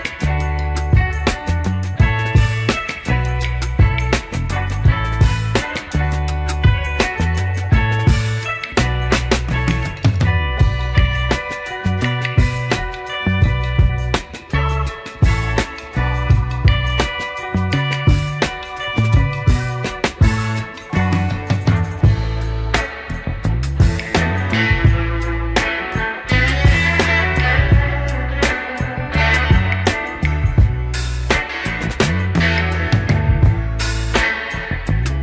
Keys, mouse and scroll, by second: 0.4 Tab, 1.2-1.8 scroll up 2, 2.4 click, 2.8 shift+middle click, 3.9 shift+click, 5.8 click, 6.2 click, 7.9 click, 8.5 click, 8.7 click, 9.8 click, 10.2 click, 10.9 Tab, 11.3 click, 12.8 g, 15.2 click, 15.3 Tab, 15.9 Tab, 16.5 drag, 17.0 shift+middle click, 18.0 click, 19.2 click, 25.5-27.7 scroll down 6, 28.3-29.9 drag, 30.5-33.1 drag, 33.9 click.